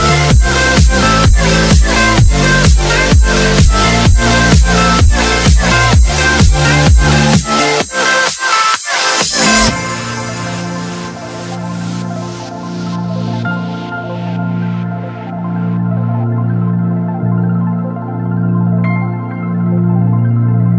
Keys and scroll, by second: 4.8 space, 5.2 shift+F2, 11.7 Escape, 13.2 t, 13.6 r, 16.3 shift+F2, 18.8 Escape.